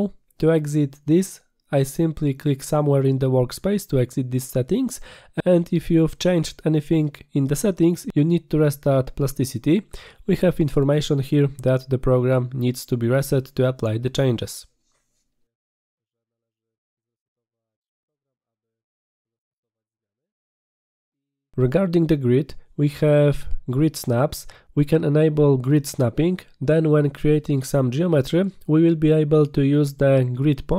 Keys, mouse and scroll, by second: 4.5 click, 11.0 click, 20.5 click, 27.2 click, 30.0 click.